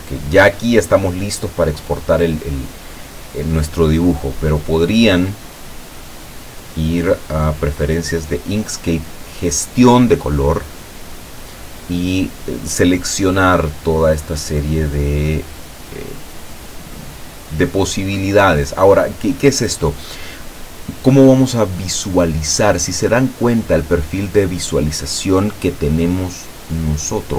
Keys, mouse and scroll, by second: 0.6 click, 1.1 click, 4.9-8.3 drag, 14.3-18.6 drag.